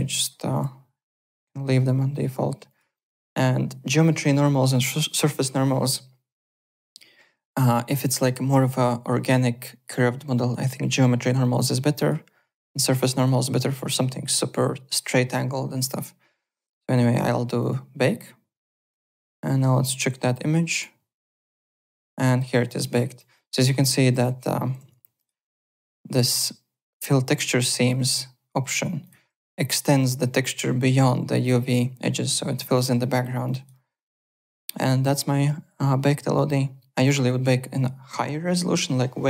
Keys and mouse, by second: 0.5 click, 2.7 click, 11.5 click, 13.1 click, 17.6 click, 19.3 click, 20.2 click, 21.2 click, 23.1 click, 24.1 alt+Tab, 24.8 alt+Tab, 25.2 alt+click, 28.5 alt+Tab, 29.0 alt+click, 32.8 click, 33.4 click, 34.0 click.